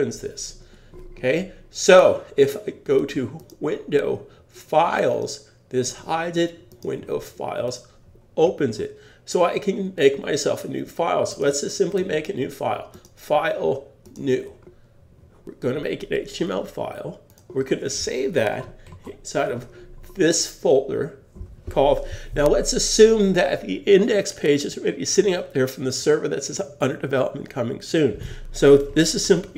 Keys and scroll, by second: 18.9 shift+super+s.